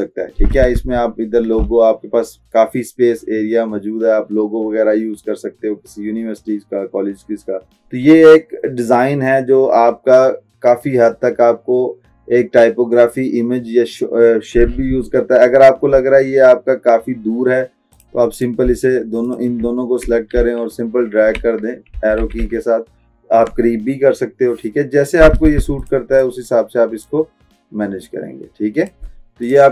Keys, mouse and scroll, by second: 19.3 shift+click, 20.4 Left, 25.9-29.5 drag.